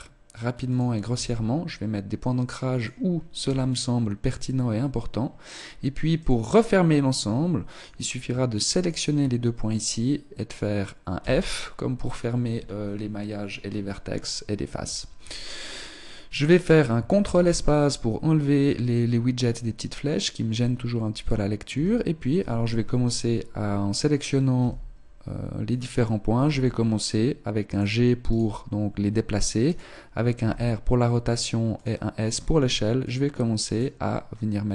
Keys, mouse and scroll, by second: 1.1 e, 1.9 click, 3.4 e, 7.7 right click, 8.2 shift+right click, 11.1 f, 17.3 ctrl+space, 21.7 r, 23.0 right click, 23.9 right click, 24.6 r, 26.5 g, 28.2 right click, 29.6 right click, 30.3 r, 32.3 s, 33.1 click.